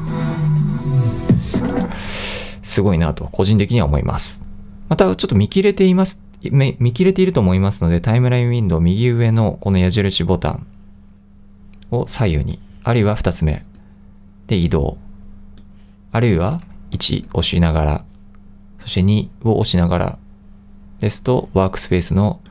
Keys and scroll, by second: 17.0 i, 19.2 2.